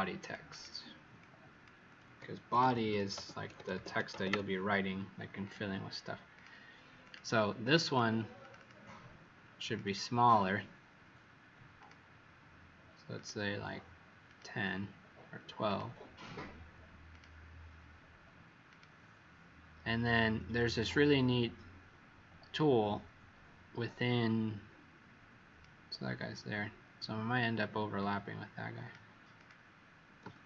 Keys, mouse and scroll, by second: 0.1 click, 0.4 click, 1.1 click, 2.2-4.7 typing, 5.3 click, 7.0 click, 7.6 click, 7.8 click, 8.3 click, 9.6 click, 9.8 click, 11.7 click, 30.1 z.